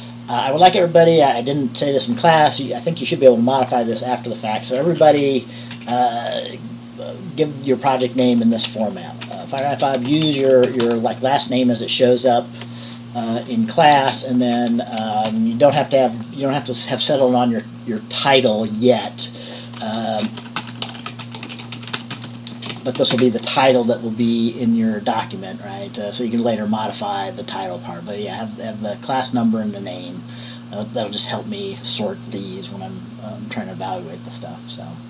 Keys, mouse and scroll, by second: 0.4 click, 5.3 Left, 5.3 Right, 5.4 Right, 5.9 Left, 6.1 Left, 7.4-8.6 drag, 8.4-11.6 typing, 15.5 typing, 20.4-23.9 typing.